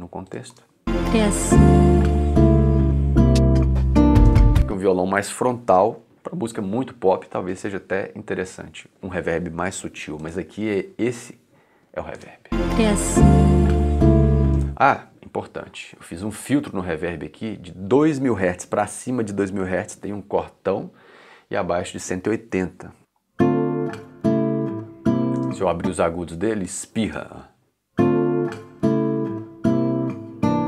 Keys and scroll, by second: 0.5 space, 4.2 space, 12.2 space, 14.5 space, 14.8 s, 23.0 space, 25.4 space, 27.0 space.